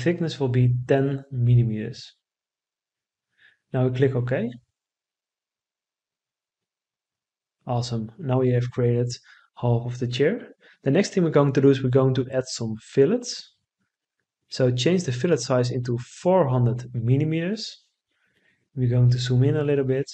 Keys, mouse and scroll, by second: 13.6 4, 14.6 0, 16.5 Return.